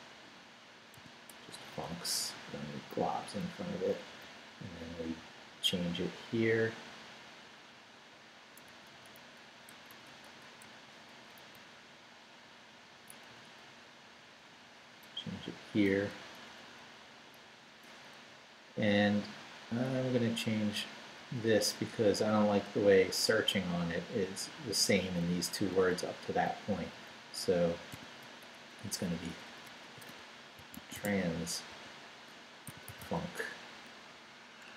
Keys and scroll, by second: 0.5 Right, 0.9 i, 1.3 BackSpace, 3.2 Down, 4.2 Down, 4.2 Up, 4.9 Right, 5.9 Right, 8.7 Right, 9.7 BackSpace, 11.5 Down, 11.9 Right, 12.9 Right, 13.3 Right, 15.8 BackSpace, 18.3 Left, 19.3 Left, 19.9 Left, 21.3 Left, 24.4 Left, 25.4 Left, 25.5 Up, 26.0 Down, 26.5 Right, 27.9 i, 28.2 BackSpace, 29.9-33.5 typing.